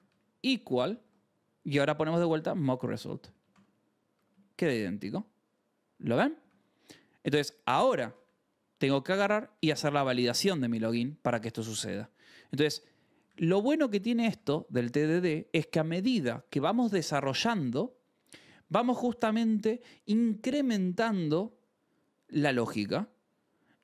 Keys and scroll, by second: 0.0-4.2 typing, 4.6 ctrl+s, 6.5 ctrl+s, 8.4-10.2 typing, 11.9 ctrl+s, 12.9-14.3 typing, 15.0 ctrl+s.